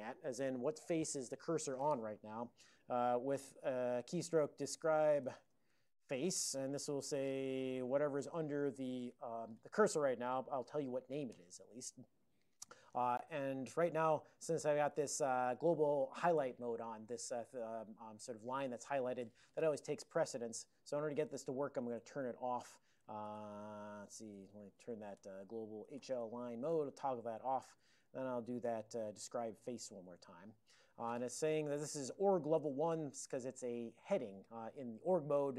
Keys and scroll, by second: 4.1 alt+x, 4.3-6.8 typing, 7.7 Left, 7.8 Left, 8.0 Left, 8.4 e, 9.2 ctrl+e, 20.4 ctrl+g, 22.0 alt+x, 23.0-26.4 typing, 26.7 Return, 27.7 alt+x, 28.3 alt+p, 28.7 alt+p.